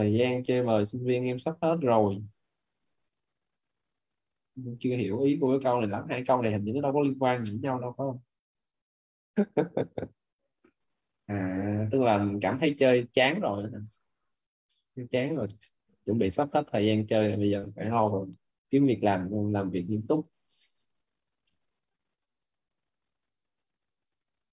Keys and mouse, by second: 14.6 click, 20.5-24.5 typing.